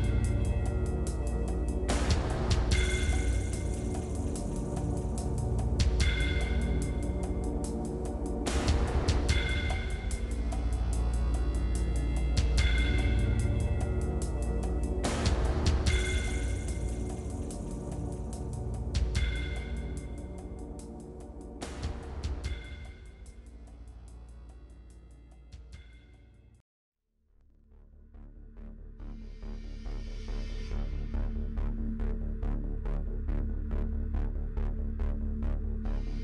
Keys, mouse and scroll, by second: 2.5 ctrl+z, 2.8 shift+click, 3.8 middle click, 4.2-5.8 shift+drag, 5.9 shift+click, 6.4 shift+click, 7.5-9.0 shift+drag, 9.5 click, 10.7 click, 11.0-12.3 shift+middle drag, 12.3-13.4 shift+drag, 13.5-15.8 drag, 15.8 middle click, 16.2-19.0 shift+drag, 19.0 shift+middle click, 19.7-22.3 shift+drag, 22.3 middle click, 22.7 shift+click, 23.5 shift+click, 23.8 shift+click, 24.0-26.1 middle drag, 26.1 shift+click, 26.6 shift+middle click, 27.3-29.0 shift+drag, 29.0 ctrl+z, 29.1 shift+click, 29.5-31.7 shift+drag, 32.4 shift+click, 33.0 shift+click, 33.2 shift+click, 34.0 click, 34.5 middle click, 35.1 shift+middle click, 35.7-36.2 shift+drag.